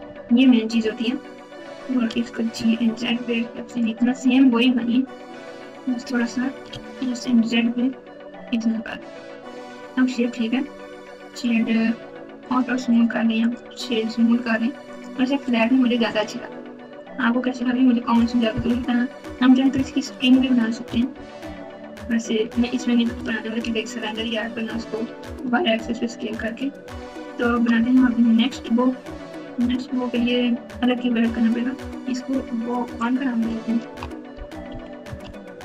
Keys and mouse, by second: 0.0-0.2 typing, 2.1 g, 6.6 s, 11.3-12.5 right drag, 12.9 right click, 14.4 right click, 15.4 right click, 17.3 Tab, 17.6 Tab, 18.7 KP_1, 19.7 KP_Add, 20.1 KP_Add, 20.2 KP_Add, 21.1-21.9 ctrl+KP_8, 22.4 KP_8, 23.1 KP_Subtract, 23.5 KP_Subtract, 23.6 KP_Subtract, 24.3-25.0 ctrl+KP_8, 25.4-26.2 KP_Subtract, 32.7 click, 32.9-35.6 drag.